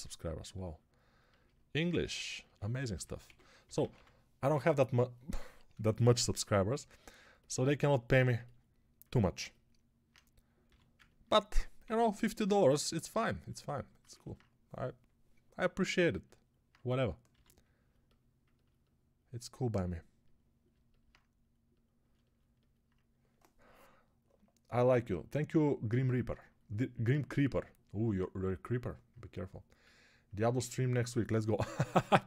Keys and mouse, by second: 3.1 g, 3.5 ], 3.7 ], 3.8 ], 10.5 g, 11.7 p, 17.2 g.